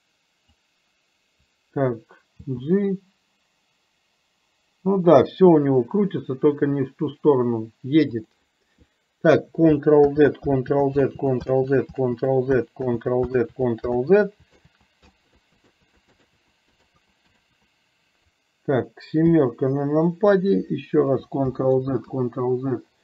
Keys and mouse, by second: 0.5 click, 10.1 ctrl+z, 10.7 ctrl+z, 12.9 ctrl+z, 14.2 ctrl+z, 14.7 ctrl+z, 17.6 ctrl+z, 19.3 KP_7, 21.6 ctrl+z.